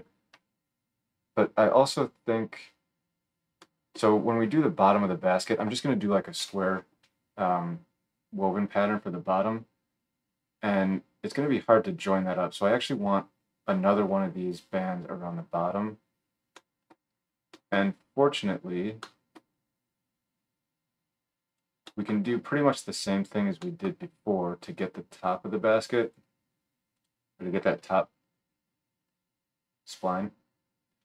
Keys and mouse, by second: 18.8-26.2 drag, 18.8-27.0 middle drag, 18.8-26.2 right drag, 27.0-31.0 drag.